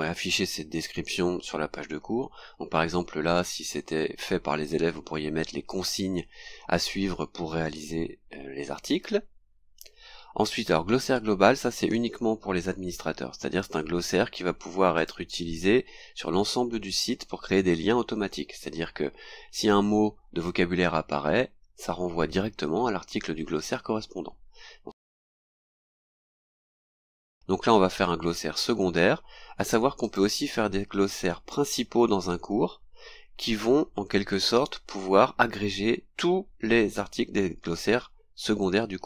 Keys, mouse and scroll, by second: 9.4-9.8 scroll down 2, 15.0 click, 26.2 click, 27.4 scroll down 2, 30.0 click.